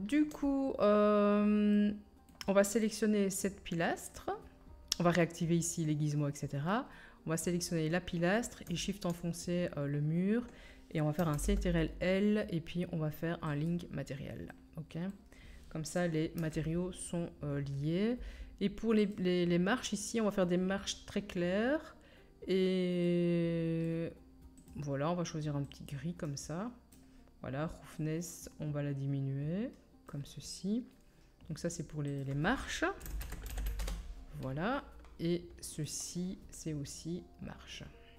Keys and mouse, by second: 2.8-4.1 drag, 4.1 middle click, 4.1-8.9 drag, 8.9 shift+middle click, 9.0-11.6 shift+drag, 11.3 ctrl+l, 13.0-29.1 drag, 16.4 KP_1, 19.0 middle click, 19.0 right click, 24.6 middle click, 24.6 right click, 27.9-35.8 middle drag, 27.9-29.1 right drag, 35.8-38.1 drag.